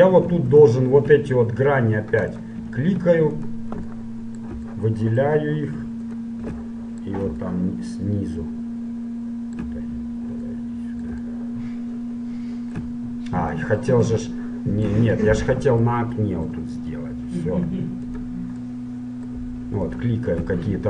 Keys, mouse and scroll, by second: 0.6 super+right click, 2.2-4.0 super+right drag, 4.0-6.6 super+middle drag, 6.2-8.0 right drag, 8.0-9.4 middle drag, 9.9-18.2 middle drag, 18.2-20.8 right drag, 20.0 middle click.